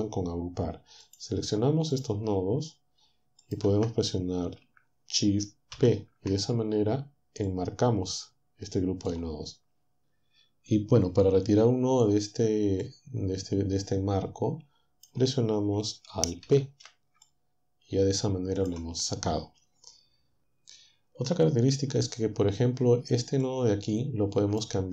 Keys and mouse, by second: 1.1 click, 2.0 shift+click, 3.5 shift+click, 5.8 shift+p, 7.5 click, 8.2-12.1 drag, 12.8-15.8 drag, 16.5 alt+p, 23.4-24.8 drag.